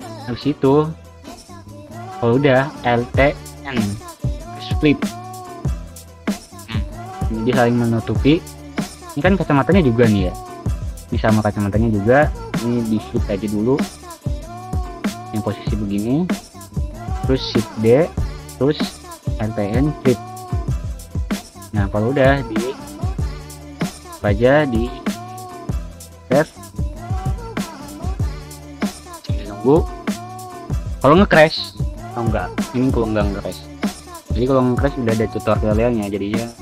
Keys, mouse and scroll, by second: 1.0 alt+n, 1.6 click, 3.5 Tab, 3.6 click, 4.2 middle click, 4.3 scroll down 2, 4.5-5.9 middle drag, 6.5 click, 7.1 click, 7.6 Tab, 8.0 3, 8.2 click, 9.1 click, 10.5 alt+n, 10.9 click, 12.5 click, 13.9 click, 15.4 shift+d, 15.7 click, 16.4 alt+n, 17.8 click, 18.2 Tab, 18.4 click, 19.6 click, 20.2 click, 20.9 click, 21.3 click, 22.7 click, 22.9 click, 23.7-27.8 scroll down 2, 27.8 click, 31.6-32.0 scroll down 2, 32.0 middle click, 34.1 click.